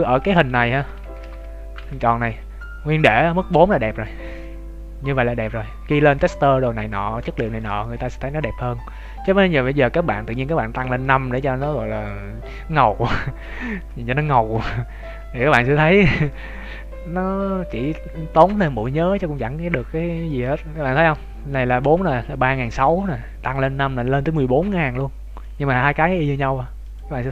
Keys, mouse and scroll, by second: 0.1 Tab, 0.7 Tab, 1.0 ctrl+z, 1.7 Tab, 2.1 middle click, 3.5-3.9 scroll up 2, 4.0 middle click, 7.4 shift+middle click, 7.9 middle click, 10.3 click, 10.9 middle click, 13.7 Tab, 14.1 Tab, 14.7 scroll down 1, 15.0 Tab, 15.4-16.1 scroll down 2, 16.1 Tab, 16.2 middle click, 20.2 click, 23.9 click, 25.3 middle click, 26.8-27.3 click.